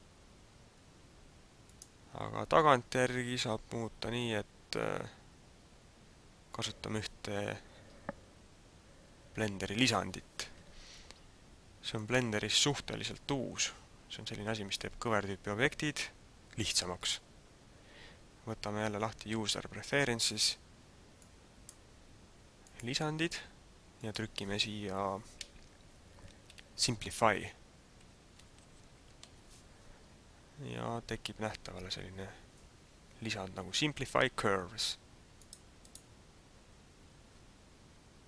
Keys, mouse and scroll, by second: 12.1 click.